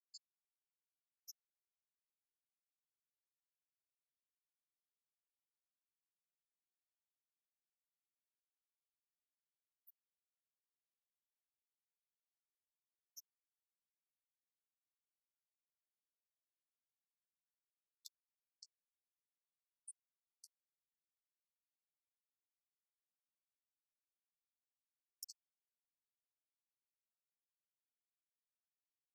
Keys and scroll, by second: 0.2 Up, 6.4 ctrl+shift+Right, 14.4 ctrl+shift+Down, 24.1 Up, 26.6 ctrl+a.